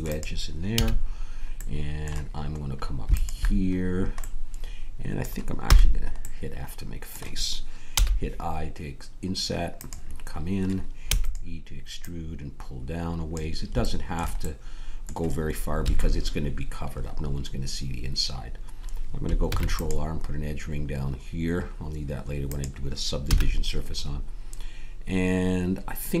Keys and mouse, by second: 0.7 a, 1.1 middle click, 1.8-3.7 drag, 3.7 middle click, 5.6 f, 7.9 i, 11.1 e, 12.0-13.3 drag, 15.8 a, 19.4 ctrl+r, 23.2 a, 23.9-26.0 drag.